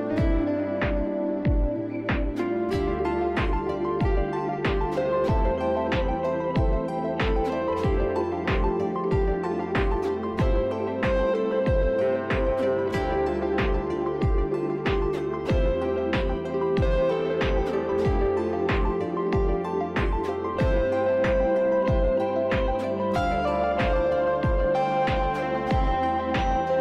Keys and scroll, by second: 1.7-2.5 typing, 4.5 ctrl+i, 4.7 Delete, 10.4 Delete, 10.5 Return, 14.2 1, 18.0 p, 18.7 Delete, 19.7 2, 20.2 c, 25.8 F4.